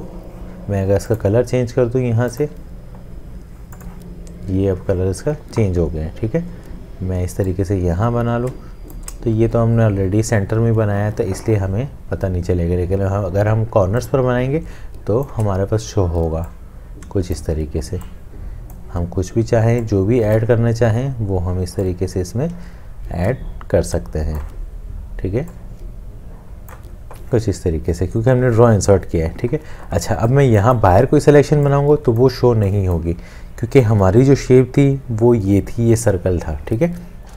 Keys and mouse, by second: 8.7 shift+click, 14.9 shift+click, 23.3 click.